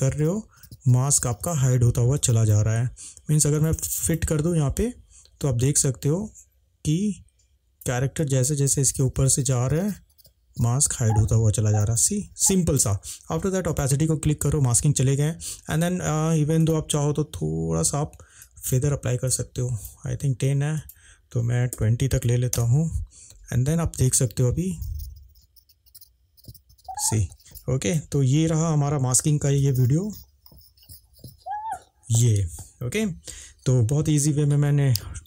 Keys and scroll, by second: 21.8 2, 22.3 0, 22.5 Return.